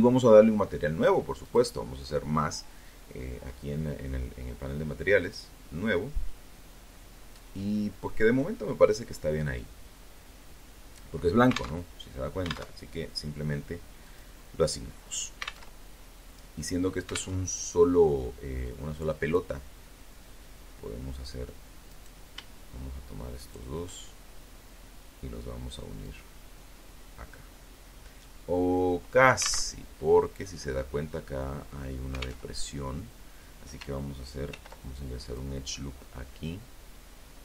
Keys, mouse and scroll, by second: 3.4 click, 9.9 alt+Tab, 10.9 alt+Tab, 12.2 click, 13.8 alt+Tab, 15.6 alt+Tab, 20.1 right click, 21.6 shift+right click, 24.2-27.9 drag, 27.9 alt+Tab, 30.6 alt+Tab, 32.6 ctrl+r, 33.4 click, 36.8 click.